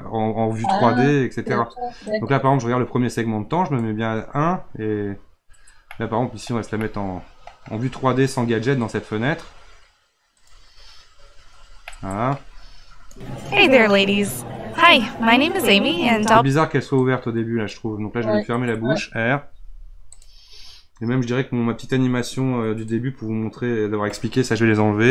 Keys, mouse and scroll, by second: 2.1-5.9 drag, 5.9-6.5 middle drag, 6.5-6.8 scroll down 2, 6.8-8.8 middle drag, 8.8 drag, 10.3 click, 11.3-11.9 scroll up 1, 11.9-13.0 shift+middle drag, 13.0 space, 16.2 space, 17.0-19.5 drag, 19.5 r, 22.8-25.1 drag.